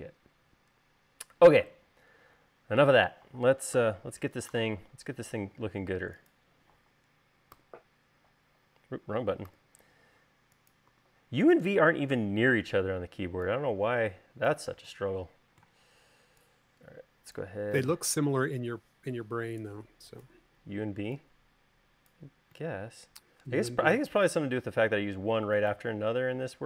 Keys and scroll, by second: 4.7 u, 8.5 u, 10.5 u, 11.9 v.